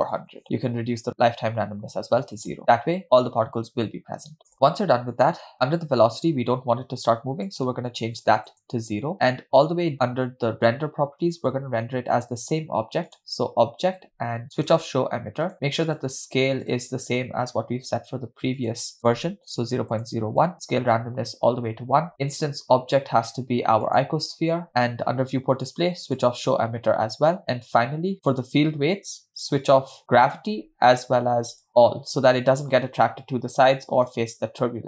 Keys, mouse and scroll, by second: 0.4 0, 1.1-2.6 drag, 4.4 click, 4.4 0, 5.5-7.6 scroll down 1, 7.6-9.0 drag, 9.1-9.7 scroll down 5, 9.9 scroll up 2, 11.4-13.6 drag, 15.2 click, 15.6 click, 16.0-17.2 drag, 17.6 click, 18.7-20.4 drag, 21.1-22.1 drag, 22.4-24.5 drag, 25.0 scroll down 2, 26.5 drag, 27.1-27.9 scroll down 8, 28.1 click, 29.7-31.8 drag, 34.3 click.